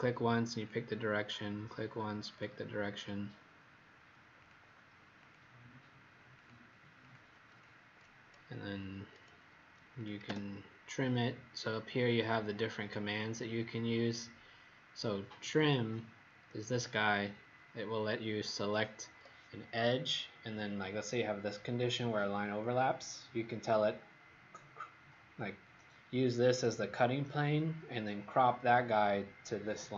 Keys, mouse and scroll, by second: 2.9 click, 4.4 click, 6.9 click, 9.9 click, 16.7 click.